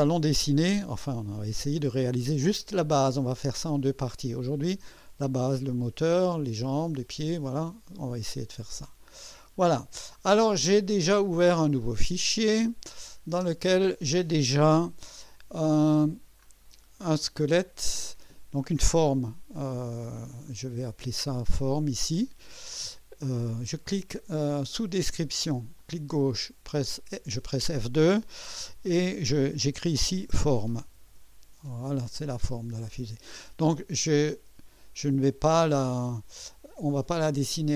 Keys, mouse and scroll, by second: 9.0 click, 10.6 click, 12.7 click, 13.3 space, 15.4 1, 16.4-17.1 scroll down 4, 17.5-18.2 right drag, 18.5 scroll down 1, 22.1 click, 25.7 click, 26.7 typing, 29.9-32.0 typing, 35.9 click.